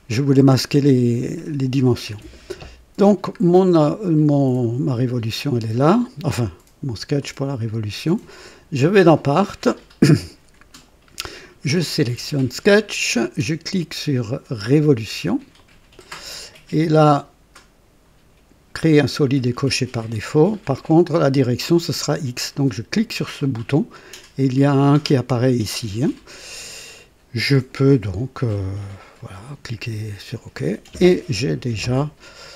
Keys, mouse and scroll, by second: 0.1 right click, 0.6 click, 2.1 scroll up 2, 3.5 scroll down 1, 7.2 click, 8.4 click, 9.7-10.5 right drag, 12.2 click, 15.5 click, 22.9 click, 29.2 click, 31.9-32.5 drag.